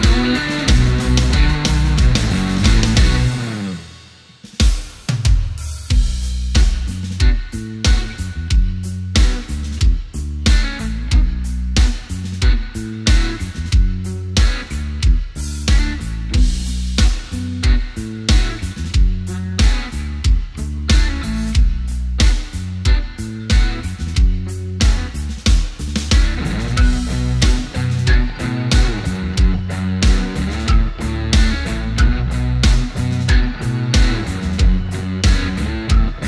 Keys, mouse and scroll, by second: 1.9 click, 3.1-3.5 scroll up 1, 4.6-12.3 drag, 12.3 shift+right click, 13.9-17.2 drag, 17.2 ctrl+right click, 19.6 click, 20.9-21.4 scroll up 1, 23.0 click, 25.5 ctrl+z, 26.3 space, 26.8 click, 27.3 space, 33.1 shift+click, 34.2 shift+right click, 35.7 click.